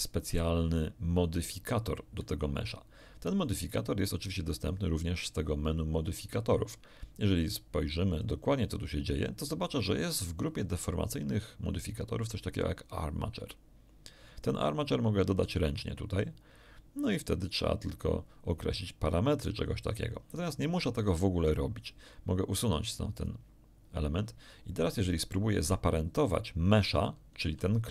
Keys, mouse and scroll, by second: 2.2 right click, 3.6 click, 8.2 click, 15.3 click, 23.1 click, 27.4 g.